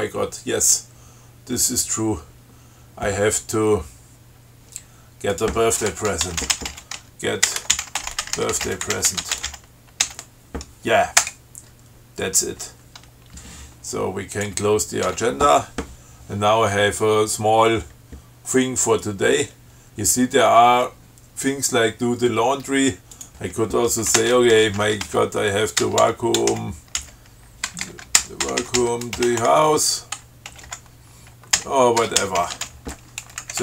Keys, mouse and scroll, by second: 5.6 click, 6.3-10.3 typing, 11.4 Return, 14.6 click, 15.3 q, 23.4 click, 24.4 alt+shift+Return, 25.3-33.4 typing.